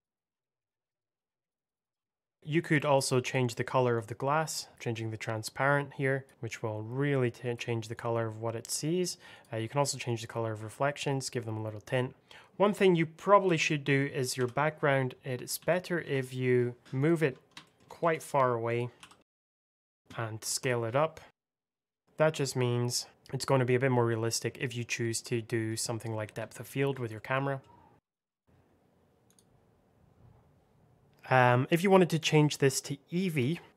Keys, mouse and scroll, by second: 0.2-1.0 typing, 0.2 click, 0.4 click, 0.8 click, 0.8 Return, 1.2 click, 1.3 middle click, 1.7 scroll down 1, 1.8 click, 2.0 click, 2.2 ctrl+z, 2.3 click, 2.4-3.1 scroll up 1, 3.1 click, 12.9-13.3 scroll down 1, 13.3 g, 14.3 y, 15.5 x, 15.9 z, 16.8 click, 17.2 scroll down 1, 17.5 shift+middle click, 17.9 s, 18.6 click, 18.9 g, 19.1 x, 20.0 click, 20.4 s, 22.3 click, 25.1 click, 25.2 middle click, 25.9-26.4 scroll up 2, 26.4 shift+middle click, 26.9 scroll up 1, 27.1 middle click, 27.6 scroll down 1, 27.9-30.6 typing, 28.1 Delete, 28.1 click, 28.2 Return, 28.3 click, 28.4 Return, 28.5 scroll down 1, 28.7 click, 29.0 click, 29.4 click, 29.9 click, 29.9 alt+middle click, 30.0 click, 30.2 click, 30.6 click, 30.8 scroll down 1, 31.0 alt+middle click, 32.3 click.